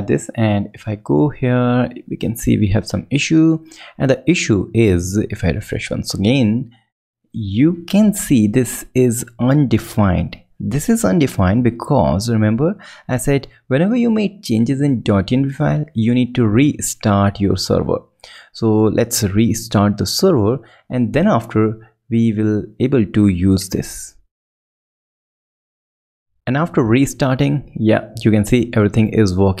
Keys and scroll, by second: 12.9 alt+super+Right, 17.1 ctrl+Up, 17.6 Return, 20.5 ctrl+alt+super+Left.